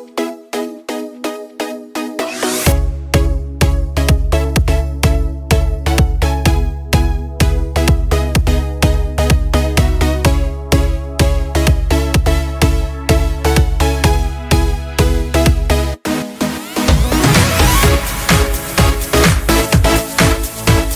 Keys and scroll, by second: 4.7 ctrl+d, 12.0 ctrl+space, 12.9 ctrl+space, 13.6 ctrl+space.